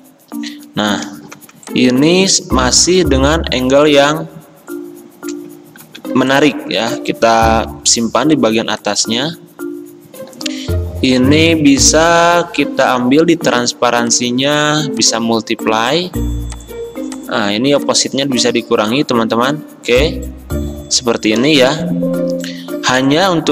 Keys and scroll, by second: 1.4 v, 5.9 ctrl+x, 7.7 ctrl+f.